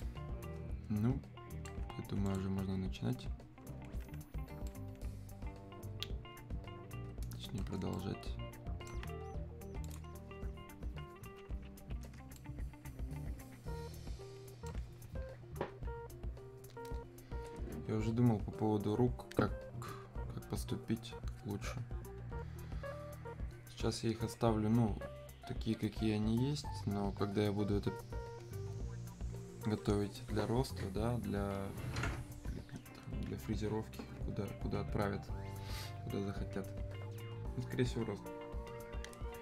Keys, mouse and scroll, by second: 2.3 click, 4.7-9.9 right drag, 9.9 click, 12.4-17.2 alt+right drag.